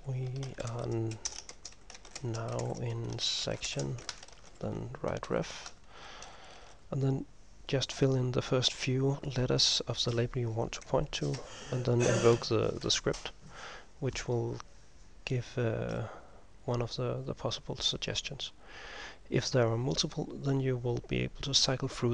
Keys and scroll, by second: 0.1-7.1 typing, 9.2 typing, 11.4 ctrl+m, 12.9 }, 16.1 typing.